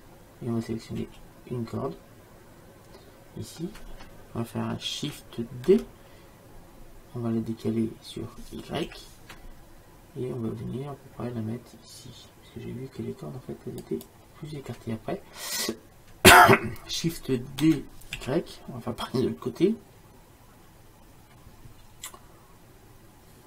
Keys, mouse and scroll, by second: 1.2 l, 6.1 shift+d, 18.1 shift+d.